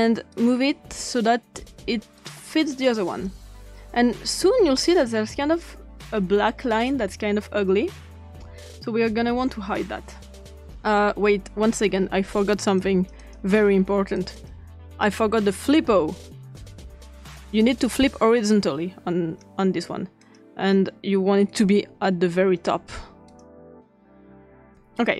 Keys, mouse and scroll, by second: 0.3-1.0 drag, 2.2-3.3 drag, 4.8-10.6 drag, 11.7 click, 12.8 click, 13.2 click, 14.2 click, 15.5-16.2 typing, 18.5 click, 20.2 click, 21.5 click, 23.3 click, 23.7 drag, 24.0 click, 24.5 click.